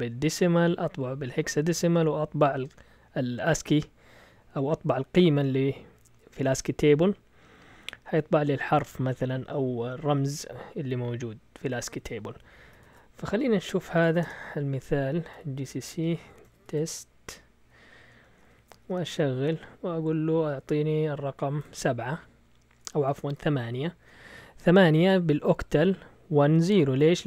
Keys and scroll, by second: 12.8 shift+super+z, 13.6 Escape, 13.7-17.2 typing, 18.2 Return, 18.5-19.4 typing, 21.6 7, 23.0 BackSpace, 23.3 8, 23.7 Return.